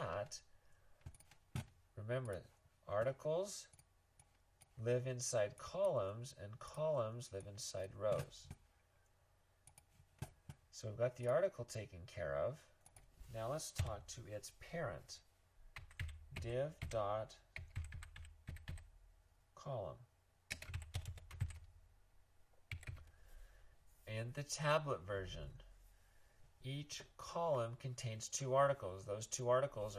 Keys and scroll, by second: 13.8 Return, 15.6-19.1 typing, 20.5-21.5 typing, 22.7 typing.